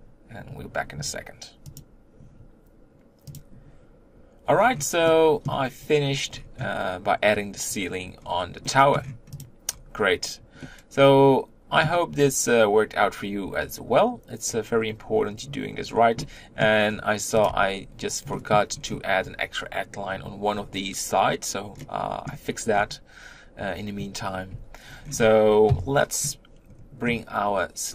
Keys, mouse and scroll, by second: 3.2 scroll up 6, 4.4-4.9 scroll down 3, 4.9-6.1 middle drag, 6.1-8.1 scroll up 5, 8.1-8.5 scroll down 3, 8.5 middle click, 8.9-9.3 scroll up 1, 9.3 click, 9.5-10.5 scroll down 3, 10.5-12.9 middle drag, 12.9-14.8 scroll up 4, 14.8-16.1 scroll up 3, 16.1 middle click, 16.7-17.3 scroll down 1, 17.3 click, 18.2 middle click, 18.6-20.3 scroll up 2, 20.3-22.6 scroll down 3, 22.6-24.4 scroll down 4, 24.4 Tab, 24.7-25.5 scroll down 4, 25.5 KP_1.